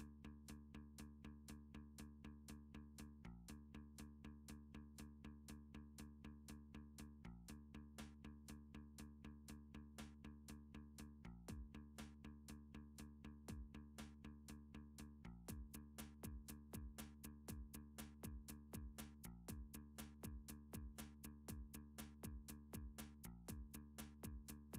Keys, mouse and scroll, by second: 0.1 g, 1.1 click, 1.3 click, 1.5 g, 2.3 click, 2.6 click, 2.7 g, 3.4 click, 3.7 click, 3.9 g, 5.6 click, 5.9 click, 6.1 g, 6.7 click, 7.0 click, 7.2 g, 8.1 click, 8.5 click, 8.7 g, 9.2 click, 9.6 click, 9.7 g, 10.4 click, 11.0 click, 11.4 g, 12.5 right click, 13.5 click, 14.3 g, 15.3 click, 16.3 Tab, 17.5 alt+z, 17.8-18.2 scroll, 19.3 middle click, 21.3 middle click, 21.8 3, 22.3 KP_3, 22.9 KP_7, 24.3-24.7 scroll.